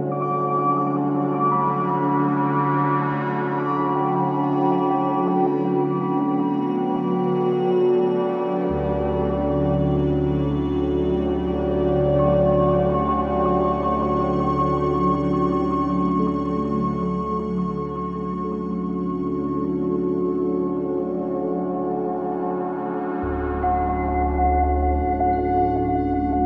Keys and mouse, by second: 7.8 click, 9.3 click, 9.5 click, 11.6-15.6 drag, 16.3 click, 21.3-22.5 drag, 22.7-26.4 drag.